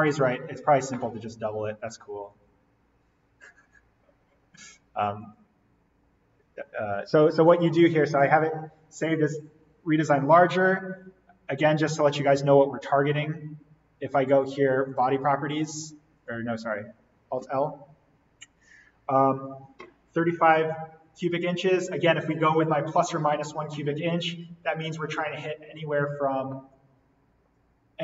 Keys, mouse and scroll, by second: 2.3 click, 5.5 click, 7.5 click, 12.1 right click, 15.0 click, 17.4 alt+l.